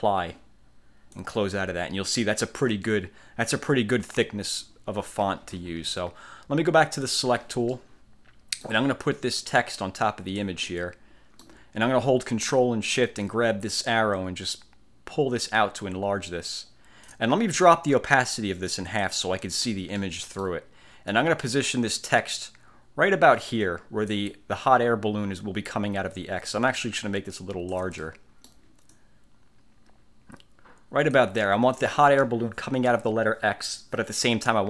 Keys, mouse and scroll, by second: 1.2 click, 7.2 click, 7.9-9.0 middle drag, 9.5-10.7 drag, 10.8-11.7 middle drag, 14.3-17.4 ctrl+shift+drag, 18.8 click, 20.1 middle click, 21.2-24.4 drag, 27.1 ctrl+shift+click, 28.1 ctrl+shift+middle click, 29.0-31.5 drag.